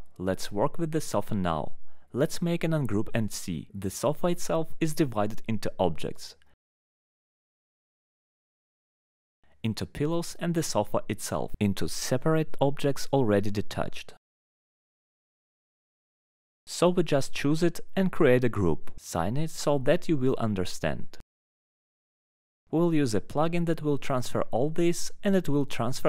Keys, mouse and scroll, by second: 0.3 middle click, 1.6 click, 2.6 click, 3.3 click, 4.3 middle click, 4.8 click, 5.2 click, 5.7 alt+middle click, 6.4 middle click, 7.3 alt+middle click, 8.1 click, 9.2 alt+middle click, 9.9 click, 10.6 click, 11.2 click, 11.8 click, 12.4 click, 12.9 click, 13.6 click, 14.0 click, 14.5 click, 15.1 click, 15.9 alt+middle click, 16.3 alt+middle click, 16.9 click, 18.1 click, 19.3 click, 20.7 click, 25.7 middle click.